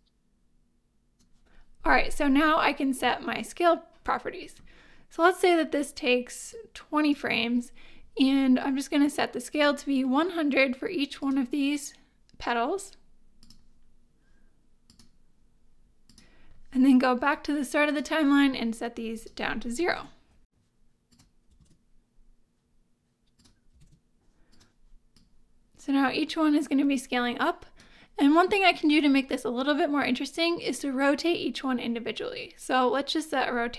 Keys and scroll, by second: 19.8 0, 19.9 Return, 21.4 0, 21.5 Return, 23.6 0, 23.7 Return.